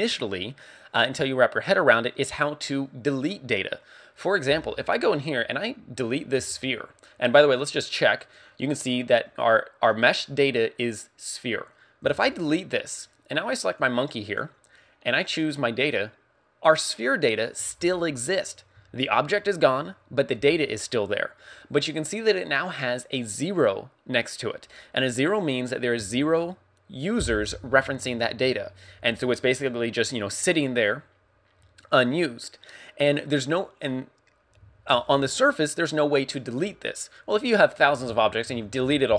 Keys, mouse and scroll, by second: 5.2 right click, 6.4 x, 8.2 click, 12.1 x, 13.7 right click, 15.3 click.